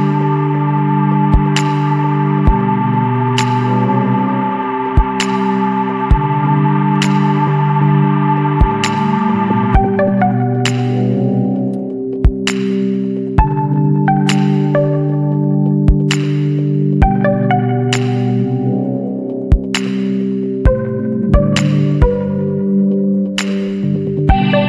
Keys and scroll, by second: 1.2 ctrl+alt+z, 1.3 space, 1.5 Delete, 2.0 ctrl+alt+z, 2.9 Delete, 3.4 Delete, 3.6 Delete, 4.1 Delete, 5.0 Delete, 5.4 Delete, 5.6 Delete, 5.9 Delete, 6.0 Delete, 6.3 Delete, 6.5 Delete, 6.8 Delete, 7.1 Delete, 7.4 ctrl+=, 7.6 space, 9.4 Delete, 10.8 Return, 11.0 Delete, 11.1 Delete, 11.5 space, 13.2 Delete, 15.1 Delete, 16.3 Delete, 16.9 Delete, 17.2 Delete, 17.6 Delete, 17.7 Delete, 17.9 Delete, 18.1 Delete, 18.5 Delete, 18.7 ctrl+=, 18.7 space, 19.0 Delete, 19.2 Delete, 19.5 Delete, 19.7 ctrl+z, 19.9 space, 20.1 Delete, 20.3 Delete, 20.4 space, 20.7 Delete, 21.0 Delete, 21.1 Delete, 21.3 Delete, 21.4 Delete, 21.5 Delete, 21.7 Delete, 22.0 Delete, 22.1 Delete, 22.3 Delete, 22.6 Delete, 22.8 space, 23.1 Delete, 23.9 Delete, 24.2 Delete, 24.3 Delete, 24.5 Delete.